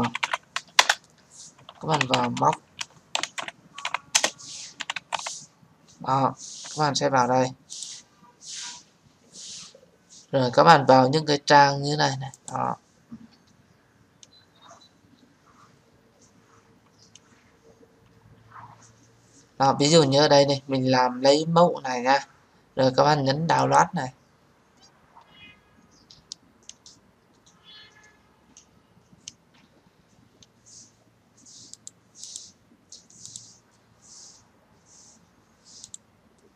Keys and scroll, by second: 0.5 Return.